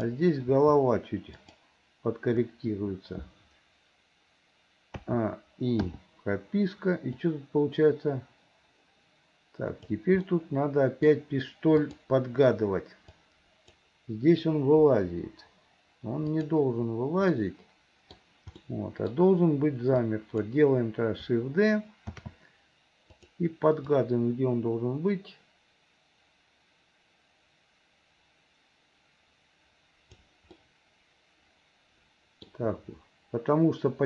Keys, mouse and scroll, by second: 0.6 r, 5.1 a, 5.9 i, 7.3-10.1 drag, 10.3 middle click, 11.9 click, 13.2 click, 14.9 Delete, 16.4 click, 17.4 middle click, 18.6 middle click, 20.0 click, 22.2 shift+d, 24.0-30.3 drag, 30.6-32.5 middle drag.